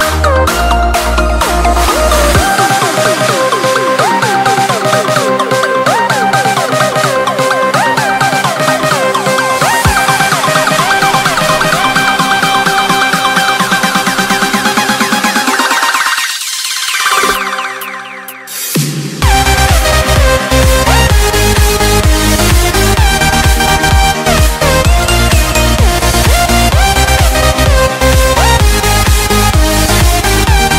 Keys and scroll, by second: 1.6 Return, 2.4 Escape, 3.6 alt+2, 5.7 alt+5, 6.9 alt+1, 8.5 alt+7, 9.5 Escape, 14.7 Home, 15.4 Return, 16.1 Up, 19.3 Down, 20.0 Left.